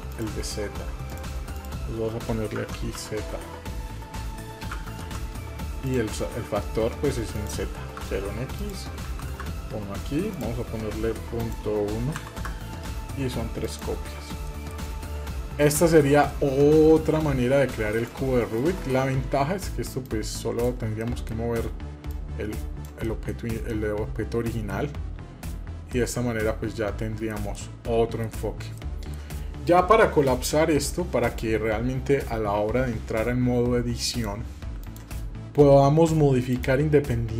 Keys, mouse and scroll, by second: 0.8-5.7 drag, 7.1 click, 8.3 click, 10.1-12.2 drag, 13.4 click, 14.2 middle drag, 14.7 scroll down 1, 15.3-15.8 shift+middle drag, 15.9 scroll down 1, 16.0-17.5 middle drag, 17.7 click, 18.3 click, 19.8 click, 20.8 middle click, 21.9 click, 22.8 middle click, 23.2 scroll down 2, 23.4-24.6 middle drag, 24.6 scroll up 1, 25.7-27.1 middle drag, 27.3-28.0 middle drag, 28.3 scroll up 1, 28.5-28.9 middle drag, 31.0 drag, 33.8 click, 36.3 click.